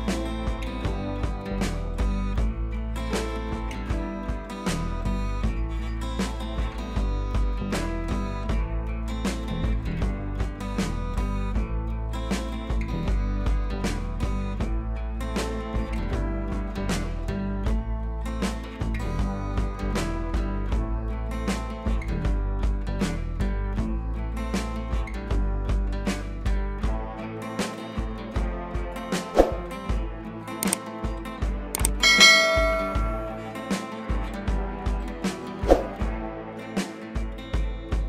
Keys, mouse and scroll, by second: 0.3 ctrl+i, 0.6 scroll up 1, 1.2 click, 1.8 ], 2.0 ], 2.3 click, 2.5 ], 2.6 ], 2.7 click, 5.1 ctrl+z, 6.1-6.8 click, 7.6 scroll down 1, 7.8 ], 7.9 ], 8.0 click, 9.7 scroll up 1, 9.8 [, 10.0 [, 10.0 click, 13.0-13.5 scroll down 1, 13.5 ], 13.6 scroll up 1, 13.8 click, 14.2-14.6 scroll down 1, 14.6 click, 17.4 scroll up 1, 20.9 click, 22.4 scroll up 1, 22.5 p, 23.3 click, 26.8 click, 28.3 b, 28.8-31.5 drag.